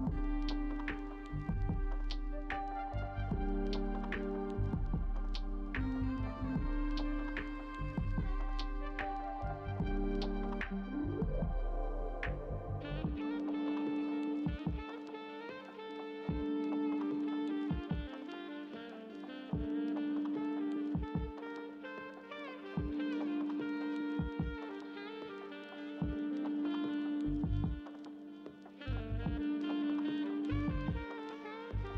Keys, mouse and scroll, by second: 1.3 double click, 9.2 ctrl+v, 13.5 double click, 19.0 ctrl+v, 22.7 double click, 28.1 ctrl+v.